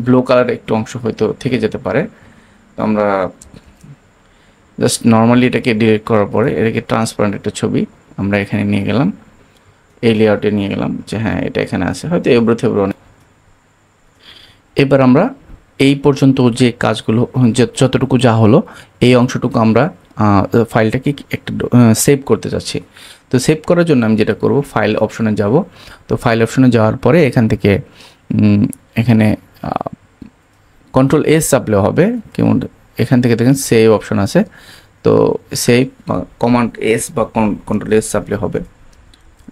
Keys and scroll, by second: 3.4 super+d.